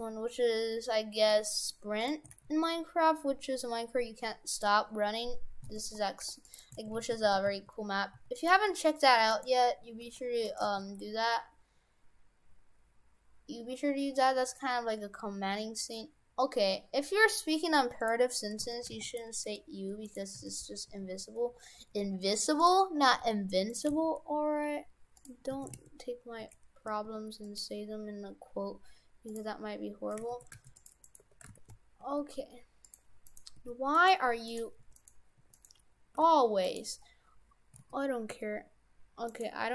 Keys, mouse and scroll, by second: 2.2 s, 5.7 shift+f, 6.6 right click, 6.8 shift+f, 9.3 right click, 10.0 g, 10.6 g, 18.6 shift+f, 19.4 right click, 20.1 right click, 20.4 shift+f, 23.2 g, 23.9 g, 25.7 shift+f, 29.3 click, 30.4 shift+f, 31.1 right click, 31.2 Tab, 31.5 shift+f, 33.3 right click, 33.6 Tab, 34.0 right click, 34.5 right click, 34.8 Tab, 35.0 right click, 35.4 Tab, 35.6 right click, 36.2 g, 36.9 scroll up 3, 37.8 s.